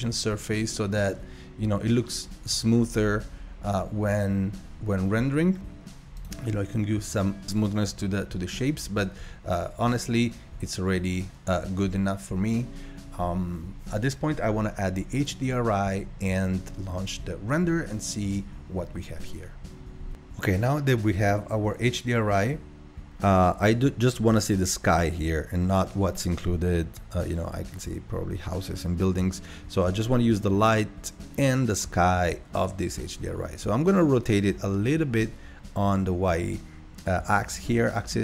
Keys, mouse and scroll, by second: 0.6-1.4 drag, 6.2-8.9 drag.